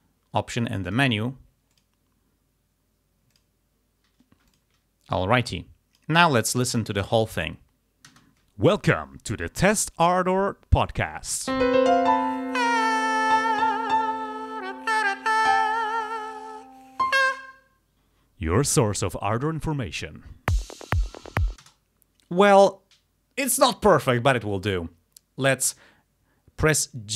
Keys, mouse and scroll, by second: 0.9 click, 1.8 click, 3.4 click, 4.5 click, 5.4 click, 7.0 click, 8.1 space, 21.7 space.